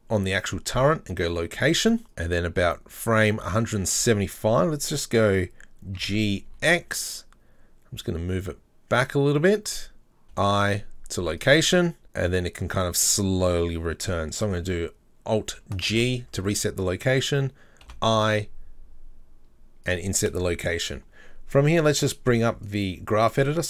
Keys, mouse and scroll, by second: 1.4 i, 2.0 middle click, 2.1-6.0 drag, 2.1 scroll up 1, 6.0 g, 11.4 i, 12.0-15.9 drag, 15.9 alt+g, 22.7 click, 23.6 click.